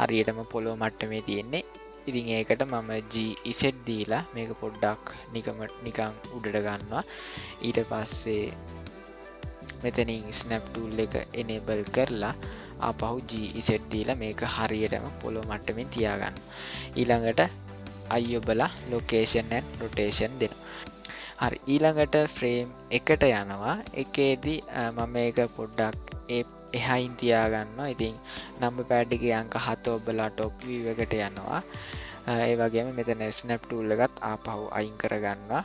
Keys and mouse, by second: 2.0 middle click, 3.2 g, 10.3 click, 13.3 g, 18.1 i, 20.5 middle click, 22.9 click, 24.7-25.3 shift+middle drag, 29.0 KP_7, 30.3 shift+middle click, 34.7 click.